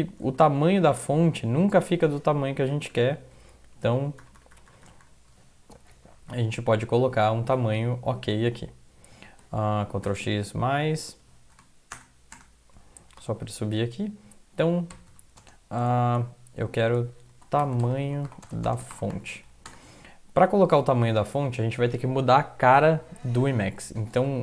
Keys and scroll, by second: 0.4 super+Up, 1.6 Down, 2.5 ctrl++, 2.7 ctrl++, 2.9 ctrl++, 3.9 ctrl+x, 4.2 ctrl+=, 4.4 ctrl+=, 4.5 ctrl+=, 4.7 ctrl+=, 5.7 Down, 5.9 Down, 6.1 Down, 6.2 Down, 7.2 Down, 9.8 ctrl+x, 10.0 ctrl+=, 11.5 Return, 11.9 Return, 12.3 Return, 13.0 Up, 13.2 Up, 13.4 Up, 15.4 space, 17.3-19.8 typing, 24.3 typing.